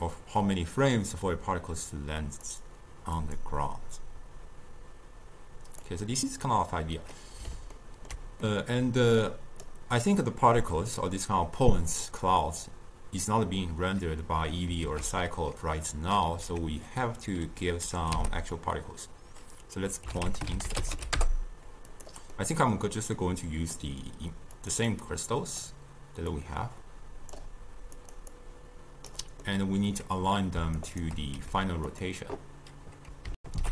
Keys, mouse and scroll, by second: 2.5-7.2 drag, 7.2-9.3 middle drag, 9.3 click, 10.8-13.9 drag, 14.9 ctrl+a, 22.4-24.7 middle drag, 24.7 click, 25.0-28.2 drag, 28.4-29.5 drag, 29.5-30.9 middle drag, 30.9 shift+right click, 31.4 g, 33.4 alt+shift+q.